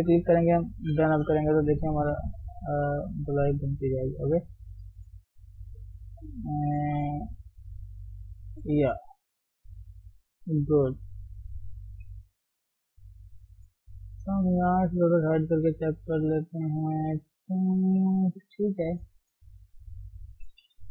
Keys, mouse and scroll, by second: 0.1 click, 0.7 g, 9.2-10.6 middle drag, 10.6 KP_3, 11.0 KP_1, 11.9 KP_3, 12.9 ctrl+KP_1, 14.6 click, 15.1 scroll up 1, 15.4-16.5 scroll down 1, 16.5 click, 16.8-18.5 middle drag, 18.5 KP_7, 18.8-20.0 scroll up 1, 20.0 click, 20.7 g.